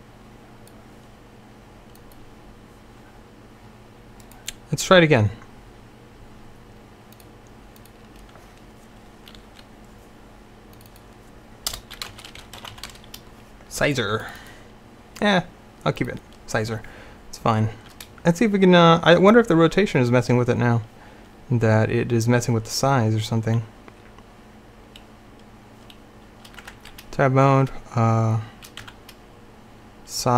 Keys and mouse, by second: 2.1-9.7 drag, 10.8-12.9 drag, 14.3-16.9 drag, 26.7 Tab, 28.9 s.